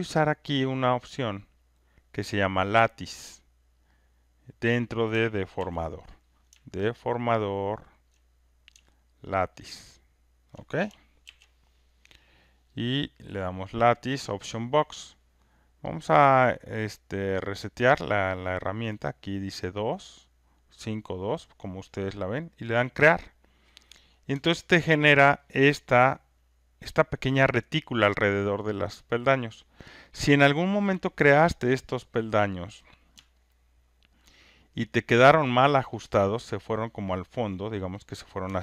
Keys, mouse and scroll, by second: 1.6 click, 5.6 ctrl+F1, 6.3 click, 8.1 ctrl+click, 10.5 click, 11.2 ctrl+F1, 12.8 click, 14.4 click, 16.0 click, 17.7 click, 22.7 click, 25.0 ctrl+right click, 29.2 alt+click, 29.8 alt+right click, 30.4 alt+middle click, 34.2 alt+click, 34.8 alt+right click, 35.4 alt+click, 36.8 click, 38.3 click.